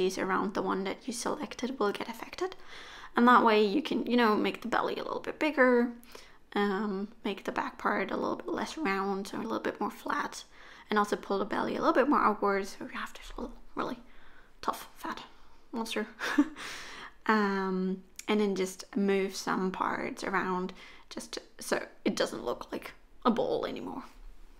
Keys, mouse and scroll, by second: 0.1 g, 3.3 click, 3.6 g, 5.6 click, 5.8 g, 7.5 middle click, 9.9 click, 10.8 g, 15.4 middle click, 16.5-16.9 scroll down 4, 16.7 middle click, 17.8-18.2 scroll up 3, 18.2 click, 18.7 KP_3, 19.6 g, 22.9 click, 24.0 g.